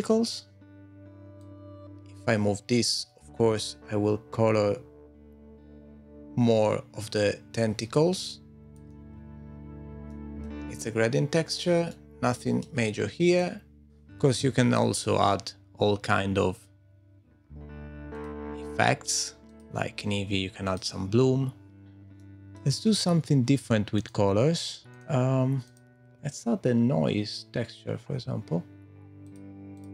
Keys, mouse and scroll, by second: 1.4 click, 9.0 super+z, 10.1 middle click, 10.8-11.1 scroll down 4, 11.9 middle click, 13.4 click, 13.9 scroll down 5, 14.0 scroll down 2, 18.1 click, 18.3 click, 18.3 middle click, 18.8 click, 19.4 click, 20.6 middle click, 20.9 middle click, 22.2 shift+middle click, 23.9 click, 24.9 click, 25.8 click, 26.5-27.7 scroll up 5, 27.2 click, 28.2 click.